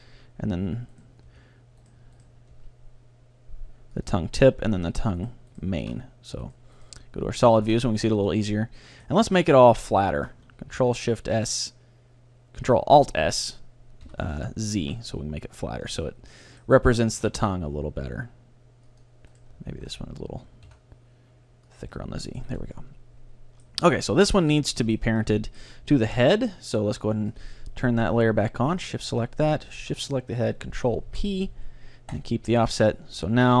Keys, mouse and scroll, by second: 1.3 g, 1.4-3.9 right drag, 2.6 g, 4.1-6.0 drag, 4.4-6.0 middle drag, 4.4-8.6 right drag, 5.9 z, 7.6-10.3 middle drag, 9.6-11.8 right drag, 10.8 ctrl+alt+s, 16.0-17.8 drag, 16.1-17.8 middle drag, 17.2 ctrl+alt+s, 19.1-20.2 drag, 19.4 right click, 19.8 ctrl+alt+s, 20.6 click, 21.0 right click, 21.8-23.6 drag, 22.0-25.0 middle drag, 22.5 a, 24.0-25.0 right drag, 25.7-27.2 middle drag, 27.4-30.7 drag, 29.8-31.5 right drag, 31.1 ctrl+p, 32.6 a, 33.0-33.6 middle drag, 33.2 Tab.